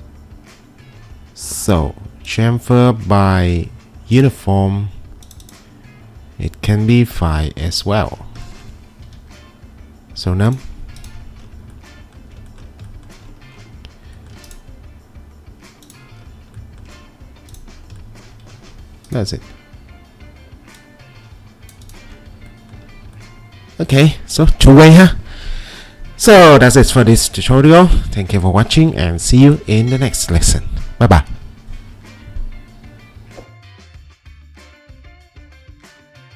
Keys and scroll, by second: 9.0 2, 19.3 w.